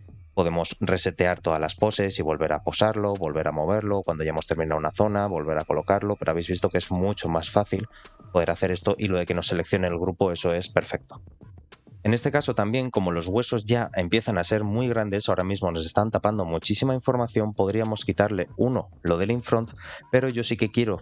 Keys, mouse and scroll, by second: 0.4 r, 2.3 ctrl+click, 2.6 shift+middle click, 3.2 r, 4.9 ctrl+click, 5.5 r, 6.4 shift+middle click, 6.8-8.1 middle drag, 8.7 ctrl+click, 11.6 shift+middle click, 12.8 shift+middle drag, 19.1-21.0 drag.